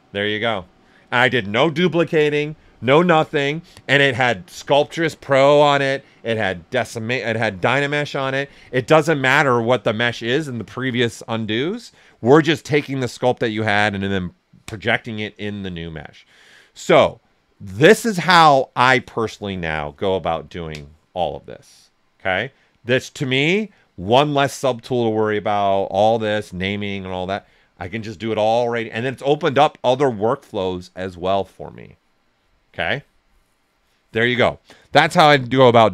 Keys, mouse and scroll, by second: 35.5-35.9 drag.